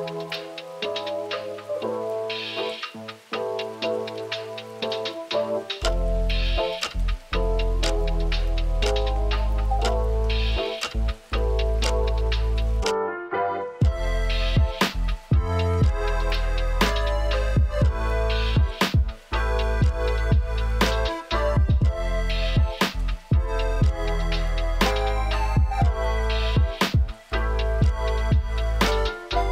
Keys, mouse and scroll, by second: 0.3 Tab, 0.8 click, 1.6 click, 2.4 Tab, 2.7 a, 2.9 KP_7, 3.3 r, 4.4 KP_1, 5.0 shift+d, 6.4 Tab, 6.8 click, 7.0 x, 7.7-8.8 drag, 10.1 click, 11.1 click, 11.7 Tab, 12.5-13.2 right drag, 13.2 Tab, 15.3 click, 17.3-18.1 drag, 18.1 ctrl+z, 19.7 Tab, 21.1 Tab, 23.6 click, 24.1 click, 24.7 click, 26.1 click, 26.4 click, 26.9 click, 27.5 shift+middle drag, 28.1-29.0 middle drag.